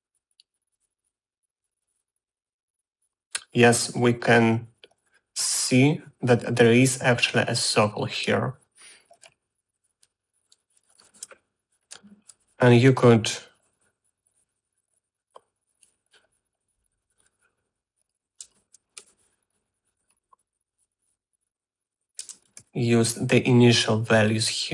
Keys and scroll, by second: 11.7 Tab, 12.2-13.3 typing, 19.1-20.1 typing, 22.8-23.8 typing.